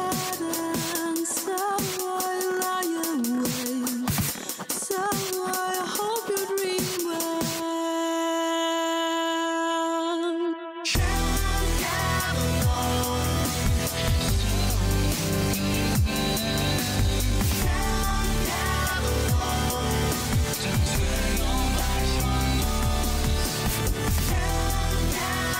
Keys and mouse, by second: 3.1 click, 7.6 middle drag, 8.5 middle drag, 9.0 middle click, 14.2 middle drag, 15.1 middle drag, 16.2-16.6 middle drag, 17.0-17.6 middle drag, 18.3 middle click, 22.4 click, 24.7 click, 25.3 click.